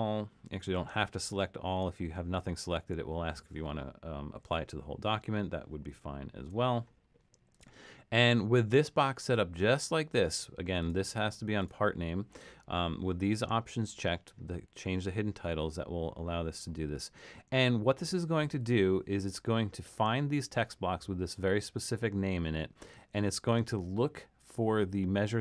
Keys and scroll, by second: 5.9 super+-.